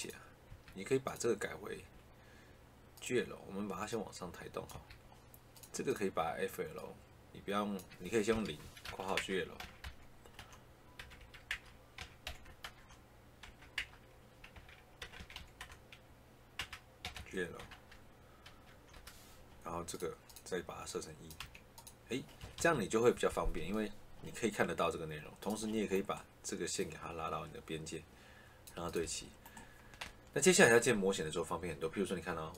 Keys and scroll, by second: 0.4 Escape, 1.6 Escape, 4.6 Escape, 8.2 0, 8.7 shift+9, 9.1 Caps_Lock, 9.5 g, 10.9 BackSpace, 11.4 Caps_Lock, 11.9 g, 12.5 shift+0, 13.3 BackSpace, 13.7 Caps_Lock, 14.4 h, 14.9 BackSpace, 15.1 g, 16.4 Caps_Lock, 16.7-18.4 typing, 18.8 Return, 21.3 1, 22.3 Escape, 28.9 Escape.